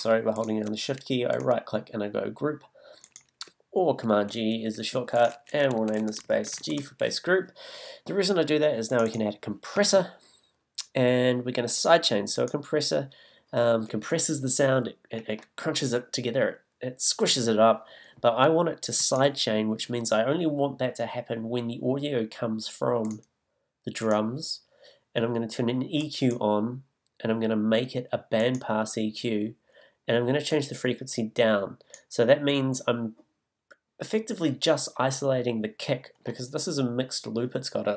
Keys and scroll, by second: 5.7 super+r.